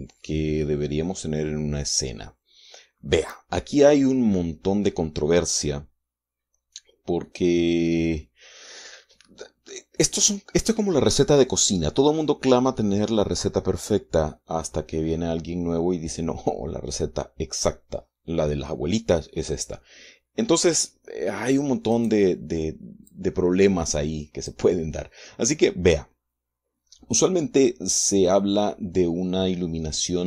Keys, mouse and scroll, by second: 2.4-3.2 scroll down 2, 3.2-3.6 scroll up 2, 19.8-21.0 drag, 22.2 middle click, 23.4-25.0 drag, 25.4 middle click.